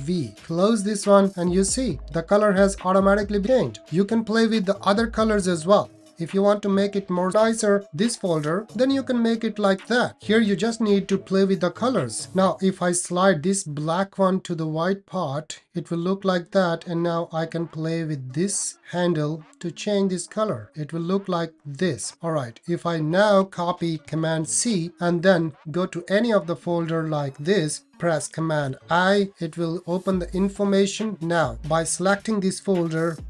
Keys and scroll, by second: 24.5 super+c, 28.6 super+i.